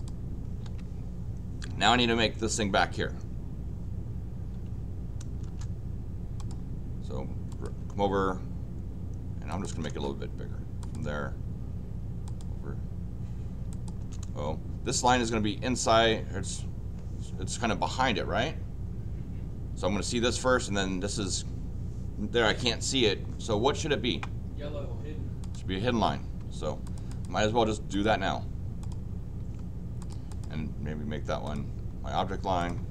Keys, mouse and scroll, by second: 0.0 click, 4.6 l, 5.4 Return, 6.4 click, 7.5 click, 9.5 click, 9.7 Return, 9.9 Return, 10.8 click, 12.2 click, 13.7 click, 14.0 Return, 25.4 click, 26.5 Escape, 26.8 click, 27.1 click, 27.9 click, 28.8 click, 29.4 Escape, 30.0 click, 30.3 click, 31.4 click, 32.6 click.